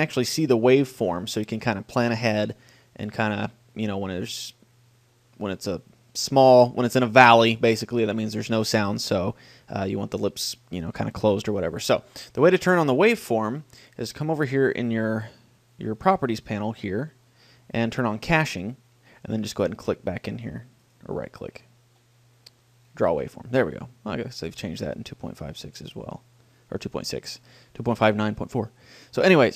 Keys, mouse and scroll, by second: 12.8-14.6 right drag, 14.2 click, 14.6-15.6 middle drag, 18.6-21.6 drag, 20.6-22.8 right drag, 22.8 middle click, 23.3-25.2 drag, 28.0-29.4 middle drag.